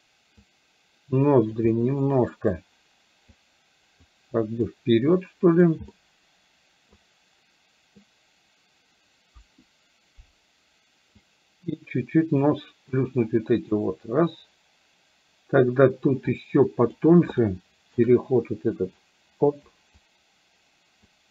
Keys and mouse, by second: 0.4-1.7 drag, 1.8 middle click, 3.4 click, 4.5 click, 5.2 click, 6.0-7.0 middle drag, 9.4 KP_1, 11.3-12.5 drag, 13.0 click, 16.3 click, 17.4 shift+middle click, 19.0 click, 20.2-21.3 drag.